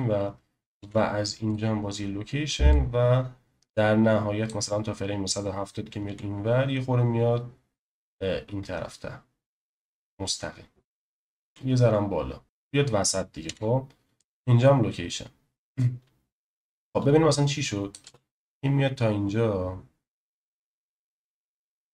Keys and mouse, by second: 0.8 i, 2.7-4.5 drag, 6.0 g, 11.4 g, 13.4 i, 16.6-17.9 drag, 18.0 space.